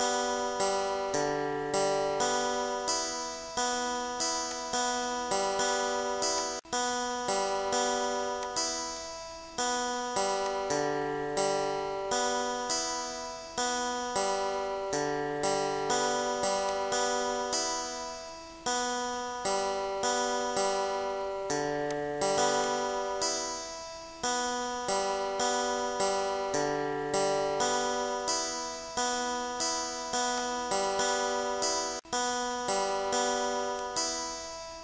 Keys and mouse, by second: 0.3 click, 4.7 click, 5.7 click, 9.6 click, 10.2 click, 14.0 click, 16.8 click, 18.2 click, 19.6 click, 20.7 click, 24.1 click, 24.9 click, 25.5 2, 25.8 click, 26.9 shift+5, 27.2 7, 27.5 click, 28.7 click, 32.8 click, 33.9 click.